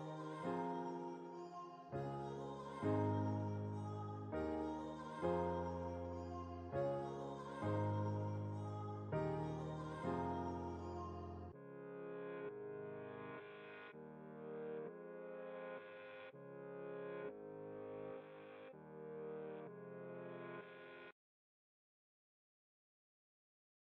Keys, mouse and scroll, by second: 0.2 ctrl+t, 0.5-2.2 drag, 2.2-3.8 alt+shift+drag, 3.8 Return, 4.2 alt+scroll down 1, 4.9-7.0 drag, 6.9 t, 7.5-9.7 alt+shift+drag, 9.7 Return, 10.4 click, 11.1 ctrl+t, 11.7 click, 12.3 ctrl+t, 12.8-14.8 alt+shift+drag, 14.8 Return, 15.2 alt+scroll down 1, 15.8 alt+scroll up 1, 16.3-19.0 drag, 19.2 alt+scroll down 1, 20.6 click, 22.0 alt+scroll down 1, 22.4 click, 22.8 ctrl+s.